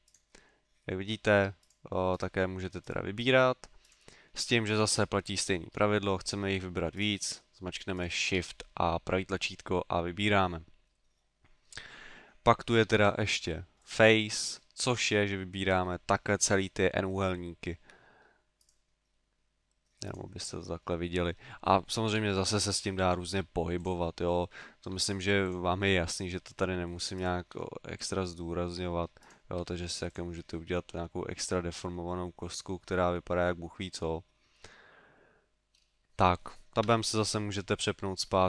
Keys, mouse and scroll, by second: 0.0 right click, 0.4 middle click, 1.7 right click, 2.4 right click, 7.0 shift+right click, 8.0 shift+right click, 8.6 middle click, 11.2 middle click, 12.9 ctrl+Tab, 14.4 middle click, 15.4 middle click, 15.4 right click, 17.4 middle click, 18.6 right click, 19.2 middle click, 20.1 right click, 20.4 middle click, 21.1 middle click, 22.1 g, 22.8 click, 23.3 g, 23.8 click, 24.2 middle click, 24.9 g, 25.5 click, 25.9 middle click, 27.2 right click, 27.6 g, 28.0 click, 28.4 middle click, 29.2 right click, 29.7 g, 30.3 click, 30.5 middle click, 36.9 Tab, 37.5 middle click, 38.2 scroll down 2.